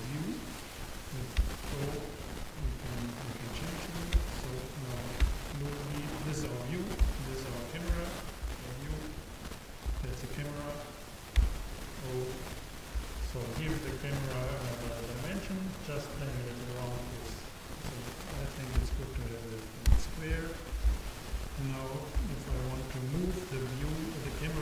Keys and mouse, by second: 1.4 KP_0, 5.3 KP_0, 7.2 KP_0, 7.9 KP_0, 12.2 KP_0, 14.2-19.9 drag, 22.2 n.